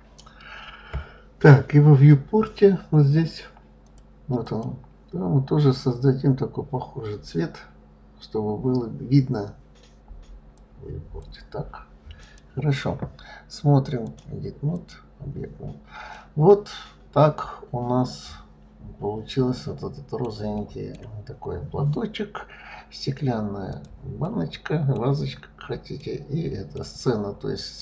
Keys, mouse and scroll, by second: 3.6 click, 10.3-12.1 drag, 13.8-15.9 drag, 15.9-18.9 middle drag, 20.3-22.5 middle drag, 22.5-23.5 scroll up 1, 23.5 click, 24.0-24.8 middle drag, 24.8-25.8 scroll down 3, 25.8-26.7 middle drag, 26.7 scroll down 3, 27.2-27.8 scroll up 1.